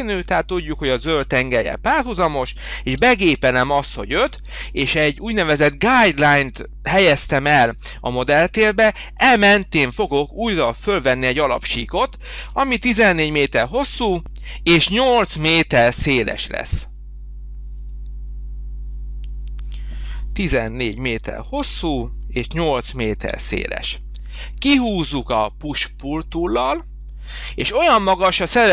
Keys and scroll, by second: 2.9 5, 4.2 Return, 12.5 h, 20.5 1, 20.8 4, 22.5 8, 23.3 Return.